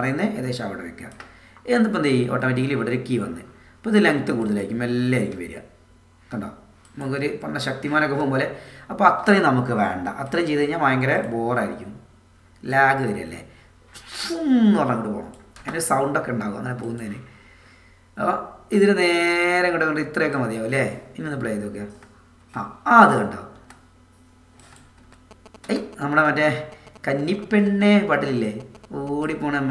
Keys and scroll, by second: 5.3 space, 21.8 space.